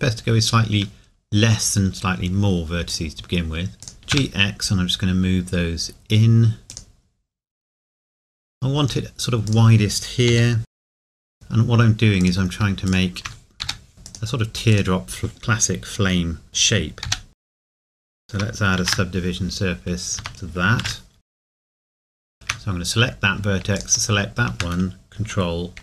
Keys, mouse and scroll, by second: 2.9 click, 4.0 g, 6.7 click, 9.5 click, 10.3 g, 10.9 click, 11.1 g, 11.3 click, 13.6 g, 14.1 click, 17.0 g, 17.3 x, 17.4 click, 17.8 g, 17.9 click, 18.1 g, 18.1 click, 20.2 Tab, 20.8 ctrl+1, 21.2 Tab, 21.7 click, 21.7 g, 22.1 Escape.